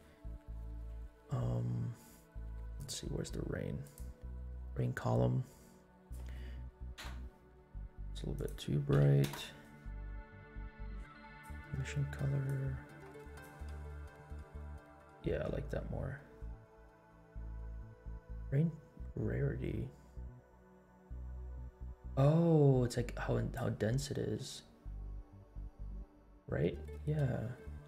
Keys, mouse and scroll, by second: 0.0 drag, 2.7 click, 3.8-4.3 drag, 6.0-7.2 drag, 7.2 \, 8.3-9.4 drag, 11.2 click, 13.8-14.3 scroll up 4, 14.9 scroll up 2, 15.8-16.3 scroll down 4, 18.3-23.8 drag, 23.9 scroll down 1, 24.3 space, 25.9 scroll up 2, 27.2 scroll down 1.